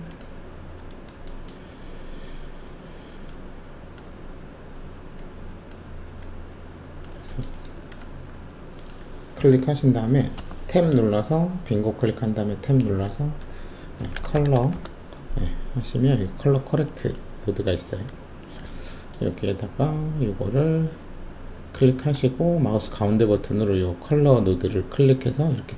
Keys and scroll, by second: 10.3 Tab, 13.9-14.7 typing.